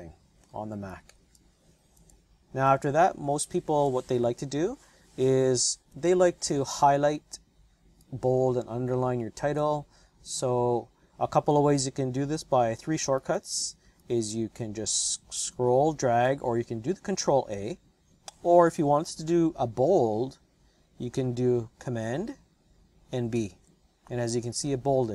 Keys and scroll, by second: 4.3 BackSpace, 5.7 BackSpace, 5.9 BackSpace, 23.5 super+b.